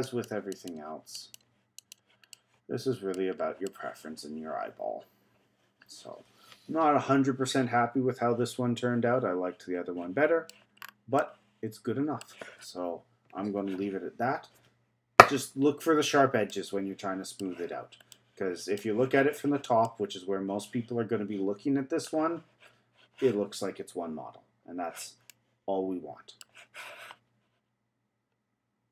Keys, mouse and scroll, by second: 2.3 middle click, 3.2-3.7 scroll down 4, 3.7-6.8 middle drag, 10.8-11.2 scroll down 3, 11.2-14.2 middle drag, 16.5-22.9 middle drag, 25.3-28.3 middle drag.